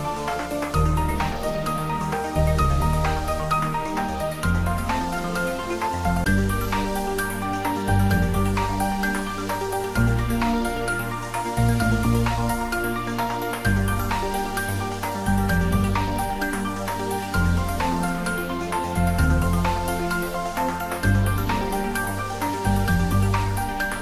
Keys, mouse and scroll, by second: 0.8 y, 4.4 click, 5.7-7.5 shift+drag, 7.5 shift+d, 7.8 z, 10.0 click, 10.6 shift+z, 11.0-11.5 scroll down 1, 11.5 middle click, 12.4 Tab, 14.4 click, 15.1-15.8 scroll up 1, 15.9 shift+z, 16.2-17.7 middle drag, 17.7 scroll up 1, 17.9-18.4 scroll down 1, 19.0-19.3 scroll up 1, 21.0 g, 21.3 y, 22.4 x, 23.9 click.